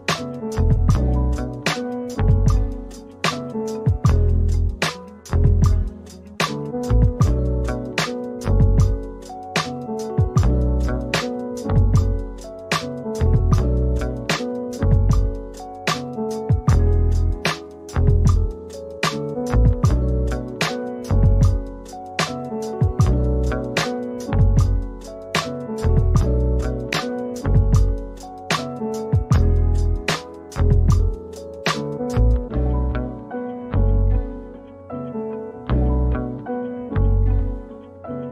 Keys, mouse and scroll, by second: 1.1 scroll up 1, 4.9 alt+middle click, 8.6 alt+middle click, 9.1 alt+click, 10.7 alt+click, 11.4 alt+click, 12.3 alt+click, 16.2 alt+middle click, 16.6 alt+click, 18.6 alt+middle click, 19.0 alt+scroll down 1, 21.5 scroll down 1, 21.6 scroll up 1, 21.7 scroll down 1, 22.1 middle click, 22.7 alt+click, 24.5 double click, 26.4 alt+middle click, 27.1 shift+click, 27.5 alt+click, 28.0 alt+middle click, 28.4 alt+click, 28.9 shift+click, 31.6 scroll down 1, 31.8 middle click, 37.0 alt+click.